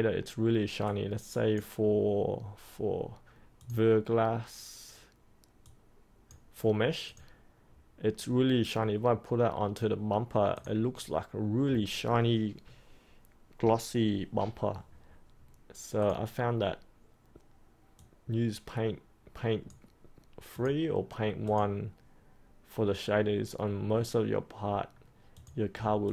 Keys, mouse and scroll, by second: 26.0 alt+click.